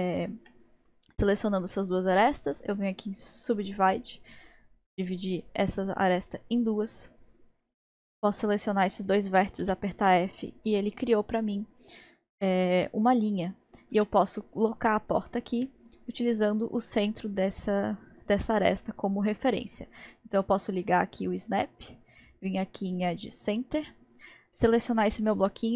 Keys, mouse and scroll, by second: 0.3-1.8 shift+drag, 1.8-3.9 right drag, 3.9-4.3 scroll up 1, 4.3 click, 5.2 click, 6.0-7.7 drag, 8.3 click, 9.6 f, 13.9 Tab, 18.7-19.5 scroll down 4, 19.5-21.3 scroll up 1, 21.3-24.6 drag, 24.6-25.7 middle drag.